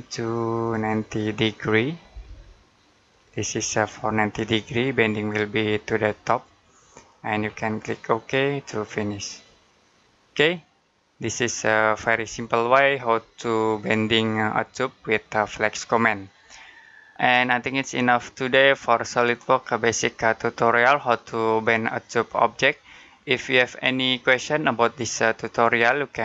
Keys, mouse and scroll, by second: 1.7-2.6 typing, 3.0 click, 3.9 middle click, 8.5 click, 9.9 middle click, 24.9 middle click.